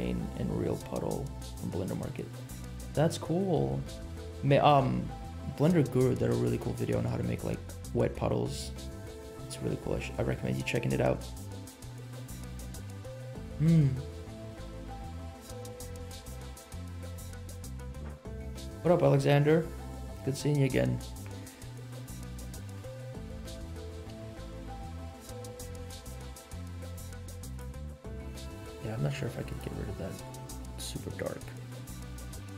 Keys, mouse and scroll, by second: 22.6 middle click, 23.4 right click, 24.2 scroll up 2, 24.5 middle click, 25.4 r, 27.9 middle click, 28.6 g, 29.9 middle click, 30.4 g.